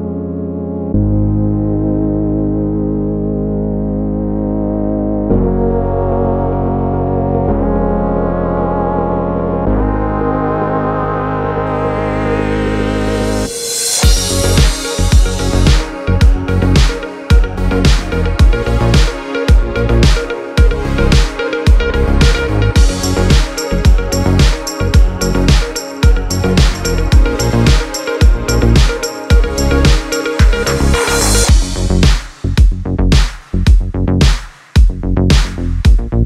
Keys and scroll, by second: 7.3 p, 23.2 v.